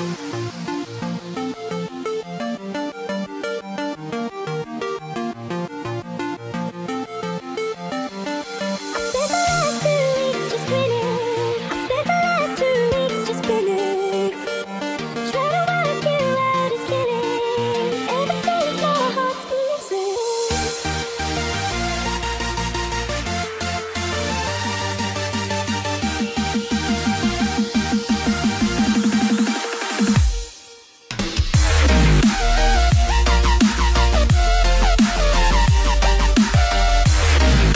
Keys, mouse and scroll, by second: 1.4 ctrl+a, 6.5 click, 17.8 click, 19.2 KP_1, 22.1 click, 26.6 click, 31.7 KP_3, 34.3 click, 37.1 click.